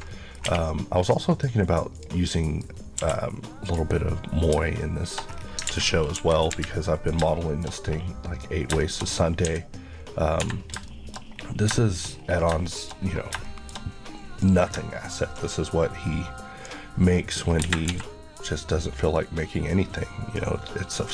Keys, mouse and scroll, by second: 0.1 alt+middle click, 0.3 scroll down 1, 0.5 1, 0.7 middle click, 1.6 scroll up 1, 2.0 click, 2.3 middle click, 2.9 scroll up 1, 3.0 q, 3.7 click, 4.9 shift+middle click, 5.1 shift+scroll up 2, 5.6 scroll down 1, 5.7 alt+a, 6.2 KP_1, 6.5 KP_3, 7.3 shift+middle click, 8.4-9.2 scroll up 3, 8.8 shift+middle click, 10.4 shift+Escape, 10.9 shift+middle click, 11.3-12.5 scroll down 4, 11.8 shift+middle click, 12.7 shift+middle click, 13.1-13.5 scroll down 2, 13.5 shift+middle click, 14.5 click, 17.7 Escape, 18.4 click.